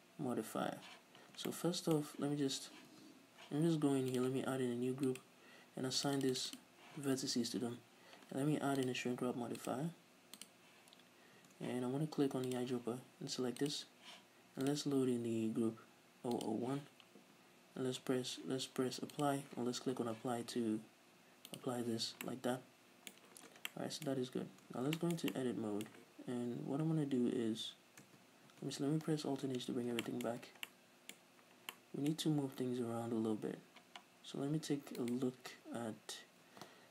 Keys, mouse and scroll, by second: 1.3 Tab, 1.5-3.0 middle drag, 3.0 Tab, 4.2 click, 5.1 click, 6.0 click, 7.4 Tab, 8.9 click, 9.6-12.7 drag, 11.4 Tab, 14.7 middle click, 14.7-21.9 drag, 15.1 middle click, 20.4 Tab, 22.3-22.9 middle drag, 23.3 scroll up 2, 23.8 middle click, 24.5 Tab, 25.2-26.4 middle drag, 26.4-26.8 scroll down 2, 26.8-28.1 scroll up 2, 28.1 Tab, 29.6 alt+h, 30.1-35.1 shift+middle drag, 30.4-30.8 scroll up 2, 31.3 scroll up 2, 33.0 scroll down 1, 33.4-33.7 scroll up 1, 35.1 right click.